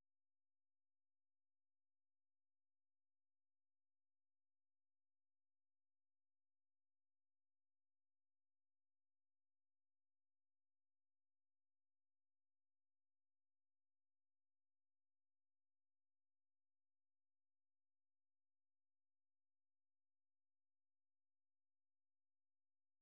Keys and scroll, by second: 2.5-7.0 typing, 9.4 super+2, 13.9 super+1, 14.9-16.5 typing, 16.8 Return, 17.6-21.0 typing.